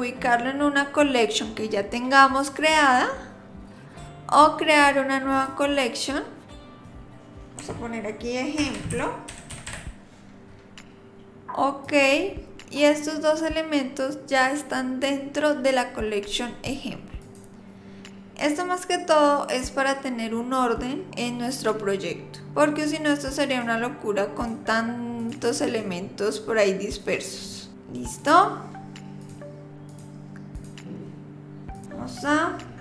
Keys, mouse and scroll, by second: 17.2 click, 23.4 click, 24.4 click, 25.2 click, 25.7 click, 27.0 click, 27.5-28.2 scroll up 31, 27.7 click, 28.2 click, 29.2 click, 29.9 click, 30.5 click, 31.7 click, 32.7 shift+click.